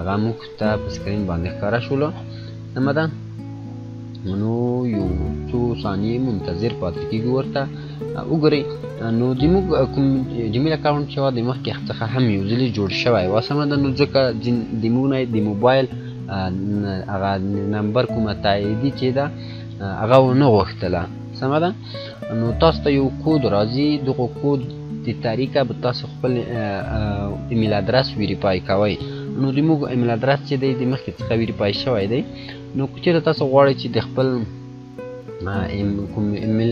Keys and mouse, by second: 35.0 click.